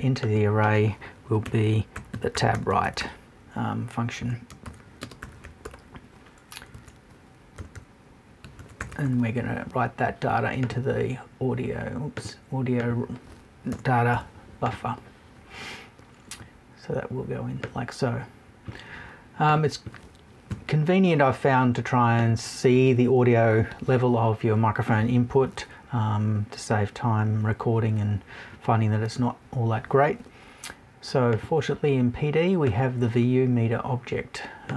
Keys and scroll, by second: 6.7 BackSpace, 13.7 BackSpace, 20.5 Left.